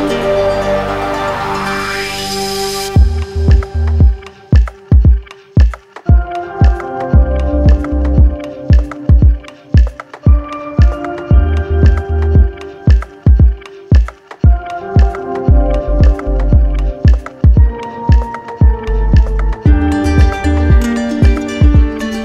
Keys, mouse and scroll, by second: 4.5-5.6 right drag, 9.9-10.9 drag, 12.9-14.0 drag, 18.3-19.4 drag, 20.9-22.0 right drag.